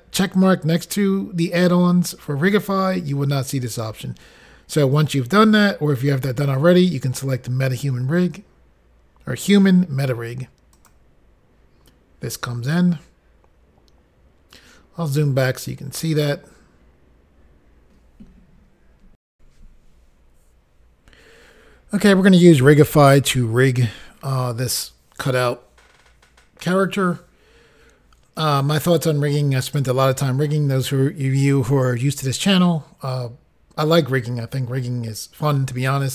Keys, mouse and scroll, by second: 10.8 click, 11.0 click, 14.7-15.3 scroll down 3, 19.3 Insert.